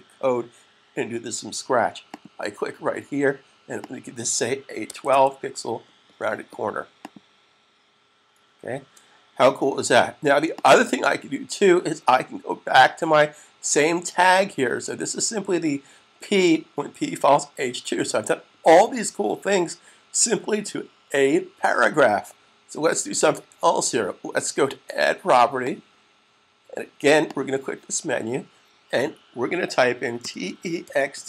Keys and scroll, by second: 4.3-5.4 typing, 8.6 super+s, 29.8-31.2 typing.